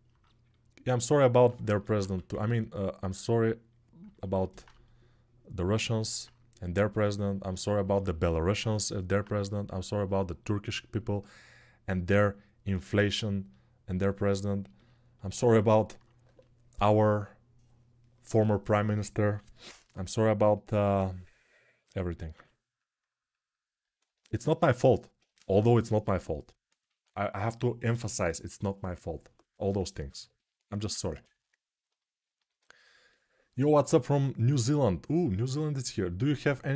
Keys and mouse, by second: 1.7 1, 22.1 g, 24.9-36.7 drag.